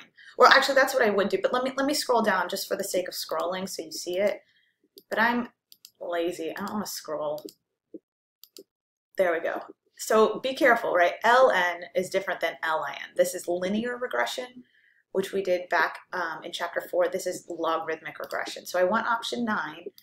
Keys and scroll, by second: 3.1 Down, 4.0 Down, 4.8 Down, 5.7 Down, 6.4 Down, 7.2 Down, 7.8 Down, 8.6 Down, 18.3 9.